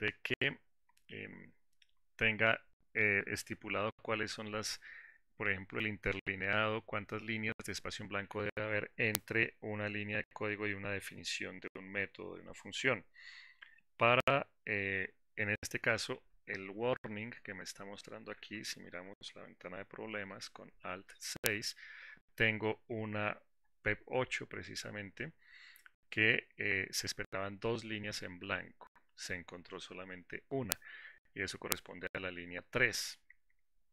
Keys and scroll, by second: 20.8 alt+6.